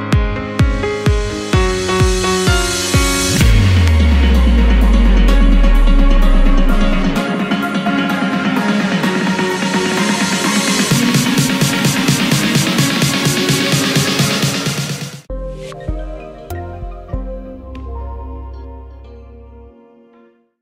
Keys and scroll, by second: 1.8 ctrl+v, 13.4 ctrl+End.